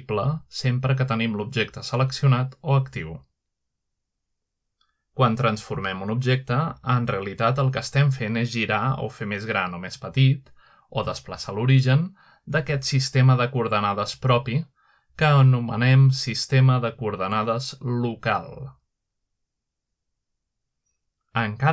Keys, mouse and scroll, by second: 1.3-2.0 middle drag, 2.4-3.1 drag, 3.5-3.8 middle drag, 3.7-4.8 scroll up 1, 5.4 click, 6.7-7.7 scroll down 2, 7.8-8.4 middle drag, 8.4 click, 9.5 g, 10.9 right click, 11.9 typing, 13.4 right click, 13.9 typing, 14.9 click, 15.7-16.3 drag, 16.9 middle drag, 17.5 shift+middle click, 19.3-20.2 middle drag.